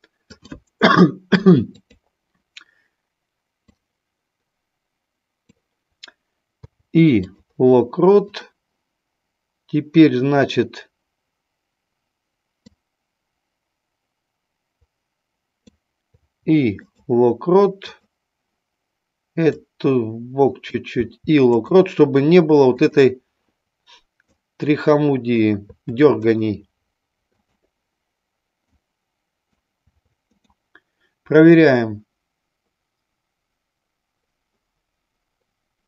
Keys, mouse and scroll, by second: 0.4 click, 1.7 click, 3.7-5.5 drag, 6.5 i, 8.4 click, 12.7-15.6 drag, 16.1 i, 17.9 click, 19.6-20.8 drag, 20.9 i, 22.9 click, 24.2-25.4 drag, 25.6 i, 27.4 click, 28.6 click, 29.7 i, 31.6-35.8 drag.